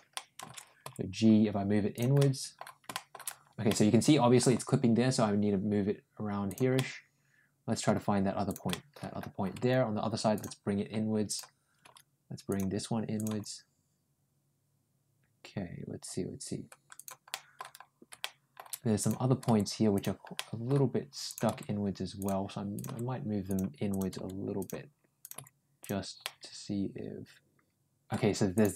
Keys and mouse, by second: 0.0 middle click, 0.7 ctrl+g, 2.0 middle click, 2.7 middle click, 3.5 middle click, 4.4 g, 6.6-7.7 middle drag, 8.3 click, 8.5 middle click, 9.4 g, 11.1 click, 11.7 g, 13.0 click, 13.1 g, 17.1 middle click, 18.0 shift+middle click, 18.8 click, 19.3 g, 20.2 middle click, 21.1 click, 21.3 g, 22.6 click, 22.7 g, 23.7 click, 24.0 g, 25.0 click, 25.2 g, 26.0-27.9 middle drag, 28.4 click, 28.6 middle click.